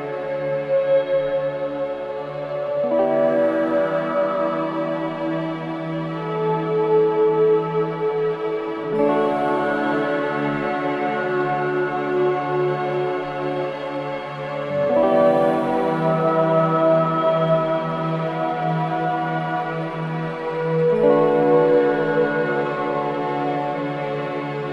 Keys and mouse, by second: 0.4 space, 1.7 space, 2.0 click, 2.4 space, 4.2 space, 4.7-7.1 drag, 8.6-9.0 alt+shift+drag, 10.5 d, 11.3 click, 12.5 click, 13.5 click, 14.0 click, 15.2 click, 16.7 shift+click, 17.9 click, 22.4-23.1 drag, 23.9 typing, 24.4 click.